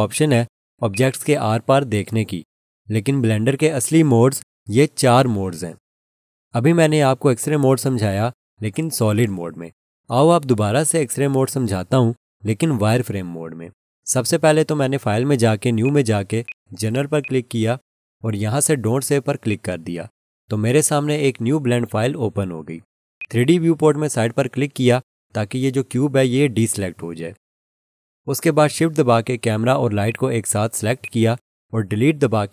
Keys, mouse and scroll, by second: 0.1 click, 0.3 double click, 15.8 click, 23.2 click, 30.1 shift+click, 31.0 shift+click.